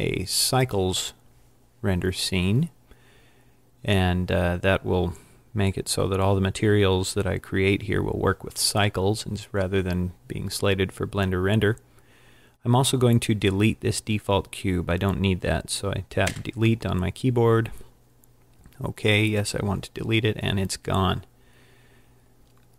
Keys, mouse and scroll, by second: 0.0 click, 16.3 Delete.